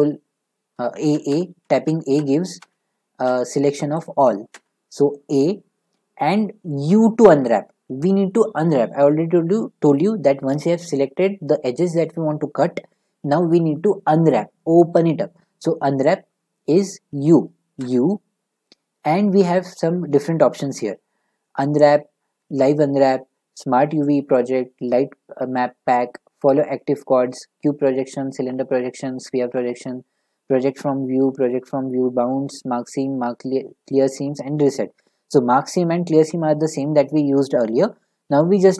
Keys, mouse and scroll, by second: 1.3-3.2 typing, 4.0 click, 4.5 a, 17.8 u.